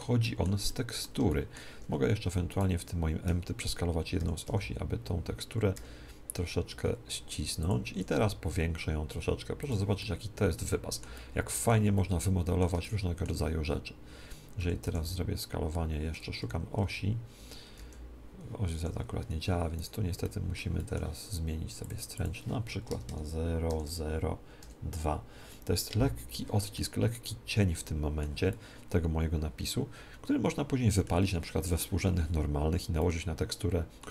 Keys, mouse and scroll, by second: 2.5-4.4 right drag, 4.3 s, 7.6-9.5 drag, 7.8 s, 9.6-11.4 drag, 10.0-14.6 middle drag, 14.5 s, 15.4 s, 19.7-21.2 right drag, 20.1 click, 20.7-21.8 middle drag, 21.8-23.5 drag, 26.7-30.4 middle drag, 32.9-34.1 middle drag.